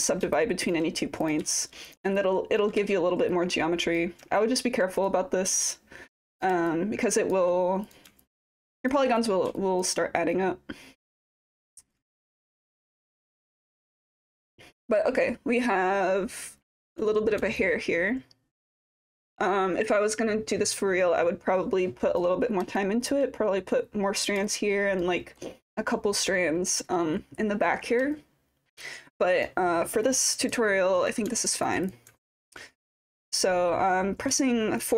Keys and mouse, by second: 0.3 alt+click, 2.2-2.7 alt+drag, 2.2 typing, 3.4 click, 4.4 alt+click, 5.6-8.4 typing, 5.7 click, 6.7 alt+click, 8.2 alt+click, 9.6 alt+click, 10.4 click, 11.2 alt+click, 12.4 click, 13.4-16.9 alt+drag, 17.6-22.2 alt+drag, 22.8 alt+click, 24.5 alt+click, 25.2 alt+middle drag, 25.6 click, 28.1-29.4 alt+drag, 30.0 alt+click, 30.8 alt+middle click, 31.5 alt+click, 31.9 click, 32.2 alt+click, 34.4 alt+click.